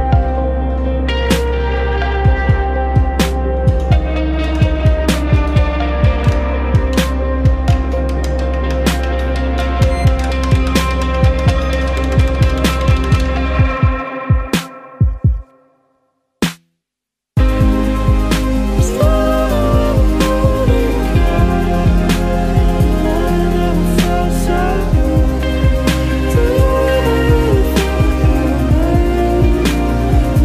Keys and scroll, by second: 0.9 ctrl+z, 1.4 ctrl+z, 2.1 ctrl+z, 2.4 ctrl+z, 3.0 ctrl+z, 3.7 ctrl+z, 4.3 ctrl+z, 5.9 alt+space, 6.5 alt+w, 7.0 ctrl+s, 8.0 alt+Tab, 8.1 ctrl+s, 8.6 ctrl+z, 17.7 ctrl+z, 18.3 ctrl+z, 22.9 ctrl+z, 23.4 ctrl+z, 23.8 ctrl+z, 27.0 ctrl+z, 27.4 ctrl+z, 28.5 ctrl+z.